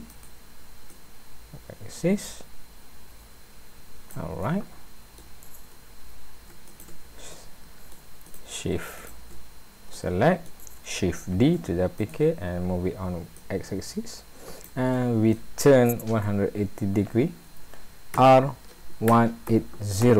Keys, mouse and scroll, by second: 0.9 click, 4.4 middle click, 6.7 shift+click, 7.4 middle click, 8.3 click, 9.0 shift+click, 9.9 middle click, 11.4 shift+d, 13.4 click, 14.9 middle click, 18.1 r.